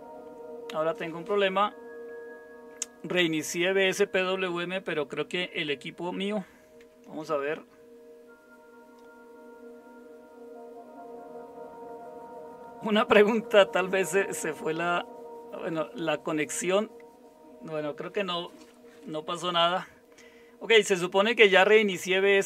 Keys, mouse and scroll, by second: 6.8 alt+super+r.